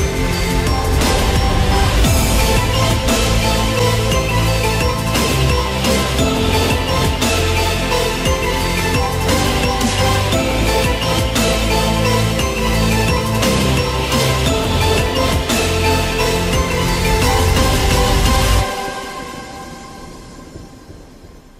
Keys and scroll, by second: 4.4 ctrl+t.